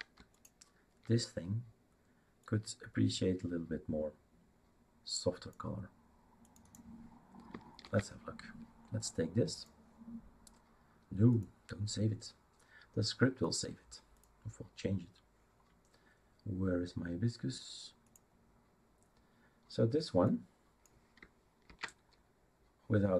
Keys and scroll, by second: 7.8 ctrl+c, 21.6 ctrl+v.